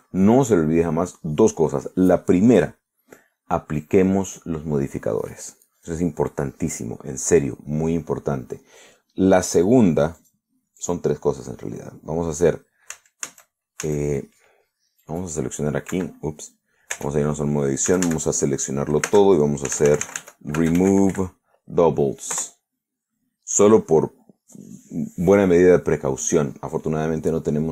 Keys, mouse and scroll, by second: 6.8 click, 11.2 click, 11.9 click, 14.0 a, 16.1 right click, 17.0 Escape, 18.0 Tab, 18.9 a, 20.1-22.2 typing, 23.4 Return.